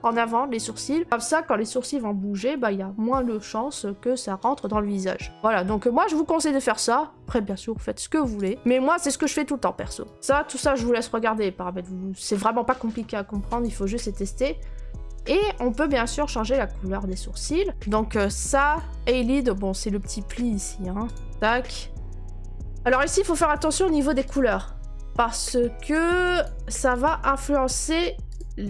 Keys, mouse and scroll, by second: 0.6 right click, 5.2 right click, 5.6-6.2 scroll up 3, 6.2-7.0 middle click, 6.2 middle click, 8.4 click, 8.7 click, 9.3 click, 10.1 click, 10.5 click, 12.2 click, 13.6 click, 17.7 right click, 18.8 click, 19.3 middle click, 21.1 click, 21.2 click, 22.0 middle click, 22.0 middle click, 24.3 click, 26.4 click, 27.0 click, 28.4 click.